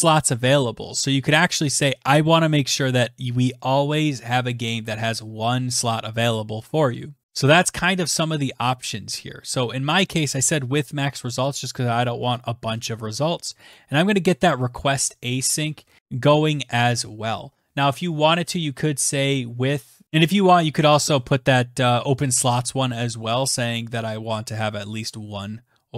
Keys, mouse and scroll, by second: 11.1 click, 11.2 click, 11.9 click, 13.1-14.5 typing, 24.3 click, 25.4 click.